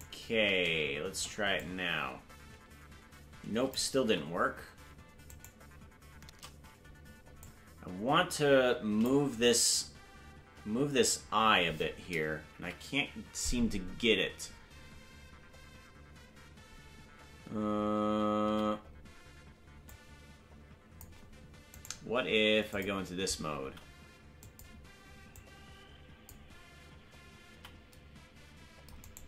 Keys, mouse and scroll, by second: 1.6-3.7 shift+drag, 4.0 ctrl+z, 5.3-6.6 shift+right drag, 7.4-9.0 shift+drag, 9.3 ctrl+z, 12.5 KP_Decimal, 14.3-15.2 scroll up 4, 15.2-16.9 scroll down 1, 17.5 scroll down 2, 18.4 c, 22.6 click, 23.6 c.